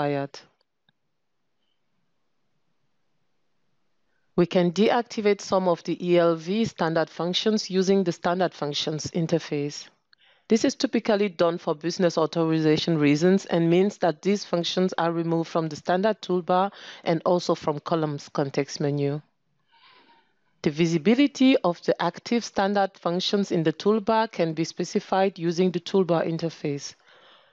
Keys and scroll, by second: 9.9 ctrl+space, 14.8 ctrl+space, 26.6 ctrl+space.